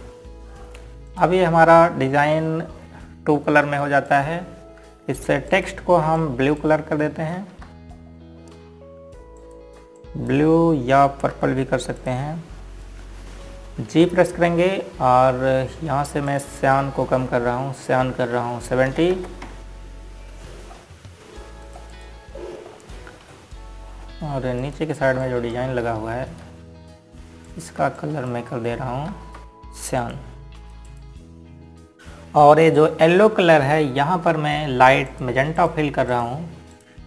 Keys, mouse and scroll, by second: 5.8 click, 7.2 click, 7.9 click, 9.0 ctrl+z, 9.6-10.0 scroll up 1, 11.7 click, 13.0 z, 13.7 click, 15.6 g, 18.0 click, 20.6 KP_7, 20.8 KP_0, 21.1 KP_Enter, 23.4 click, 24.3-24.7 scroll up 1, 26.3 ctrl+click, 26.9 click, 28.1 z, 29.1 click, 30.8 ctrl+z, 31.7 click, 31.9 z, 32.4 scroll down 1, 34.8 click.